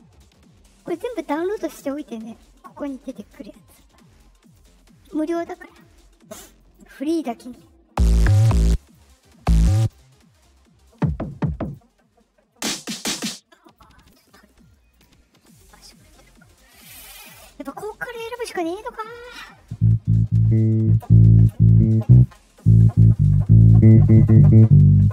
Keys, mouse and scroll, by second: 0.7 click, 3.1 click, 4.4 click, 5.6 click, 6.5 click, 8.7 click, 9.7 click, 11.6 click, 13.6 click, 13.9 click, 14.9 click, 15.4 click, 16.4 click, 16.9 click.